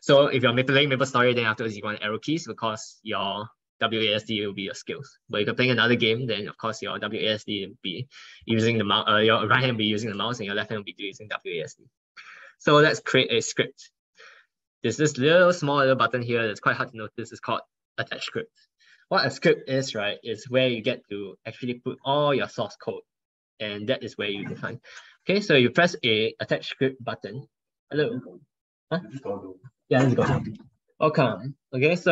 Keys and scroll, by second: 15.5 ctrl+1, 18.0 ctrl+1.